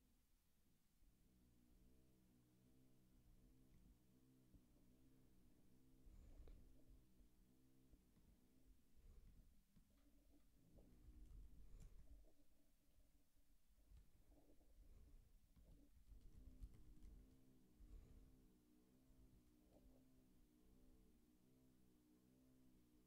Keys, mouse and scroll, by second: 13.8 ctrl+k, 15.6 click, 15.8 ctrl+a, 16.0 ctrl+space, 16.1 ctrl+e, 16.4 alt+;, 16.8 ctrl+s, 17.3 ctrl+k.